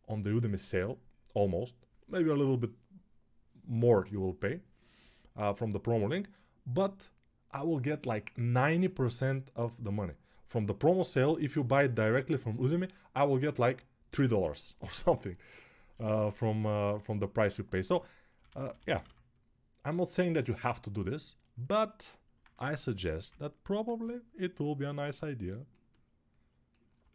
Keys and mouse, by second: 17.6 g, 18.1 ], 18.2-20.9 ], 22.3 1, 23.1 [, 23.6 [.